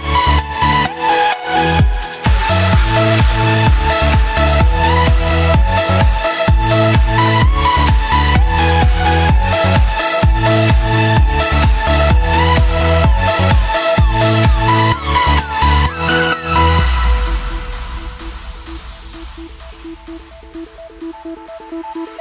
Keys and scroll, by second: 17.9 ctrl+shift+], 20.3 ctrl+t.